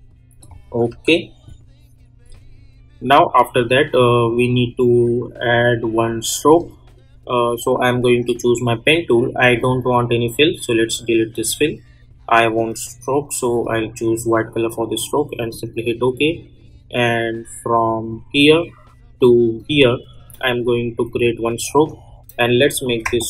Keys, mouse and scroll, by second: 0.3 click, 0.9 u, 6.5 click, 9.5-15.4 drag, 13.9 click, 18.0 click, 22.6 click.